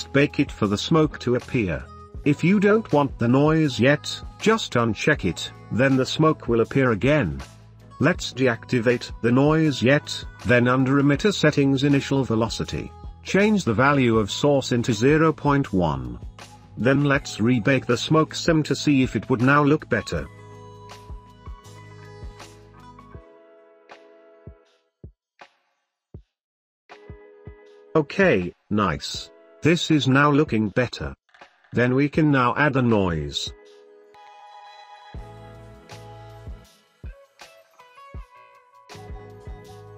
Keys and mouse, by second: 1.9 space, 5.1 space, 7.1-7.4 drag, 8.3-8.8 drag, 8.8 space, 14.6-16.8 drag, 18.3 drag, 19.3-22.6 drag, 23.2 space, 27.4 space, 27.9 click, 28.1 space, 28.3 middle click, 28.9-29.3 middle drag, 29.3-29.7 drag, 29.9 KP_3, 30.7 click, 30.9 space, 36.2 click, 38.3 click.